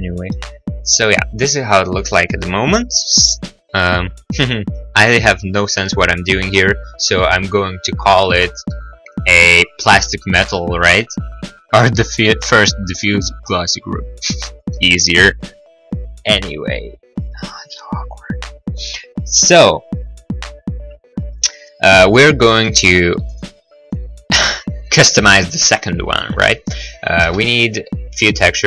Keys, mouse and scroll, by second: 1.4 scroll, 8.8 middle click, 9.2 middle click, 14.7 middle click, 15.1 middle click, 22.6 middle click, 22.9 middle click, 23.2 right click, 23.4 right click, 25.8 middle click, 26.3 middle click, 27.2 shift+a.